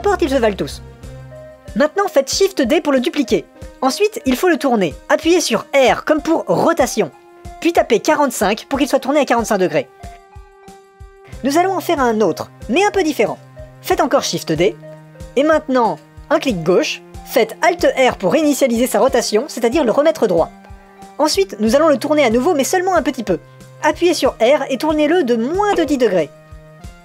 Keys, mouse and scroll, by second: 3.8 shift+d, 15.4 shift+d, 19.3 alt+r, 24.3 r.